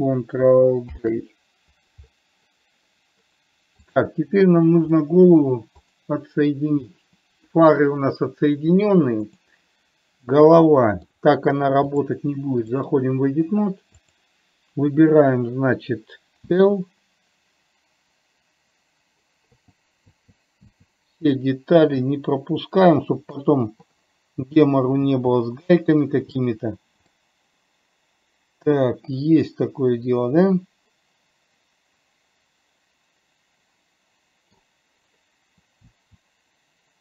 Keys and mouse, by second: 1.2 ctrl+j, 4.1 click, 5.2-5.9 middle drag, 9.6 click, 10.6 middle click, 12.2-13.5 drag, 14.4 click, 20.6 l, 21.7-23.6 middle drag, 26.0 l, 27.5-35.0 middle drag.